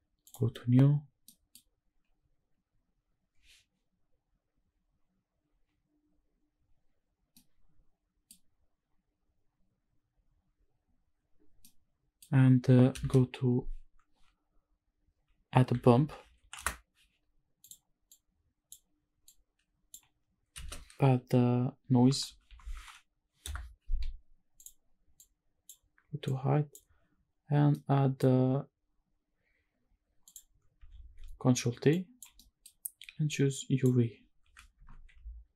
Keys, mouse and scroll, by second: 0.3 click, 1.2 middle click, 2.4-3.9 scroll down 1, 3.9-35.5 scroll down 1.